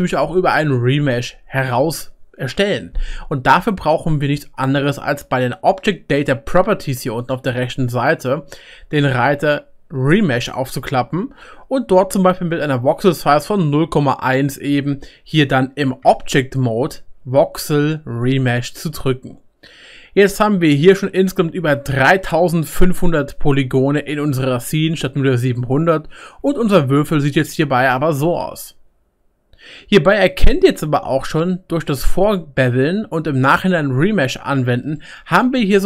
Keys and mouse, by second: 6.9-11.6 middle drag, 7.2 click, 10.5-11.6 drag, 16.0 Tab, 18.9 click, 18.9 middle click, 18.9 right click, 23.6-24.9 drag, 23.6-24.9 middle drag, 23.6-24.9 right drag, 26.4 Tab, 35.7 click, 35.7 middle click, 35.7 right click.